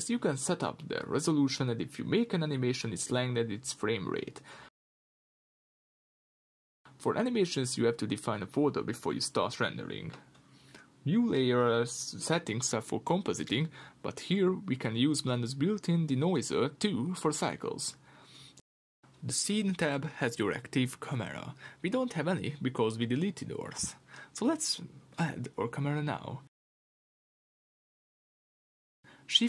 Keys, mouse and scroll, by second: 26.7-29.4 scroll down 1.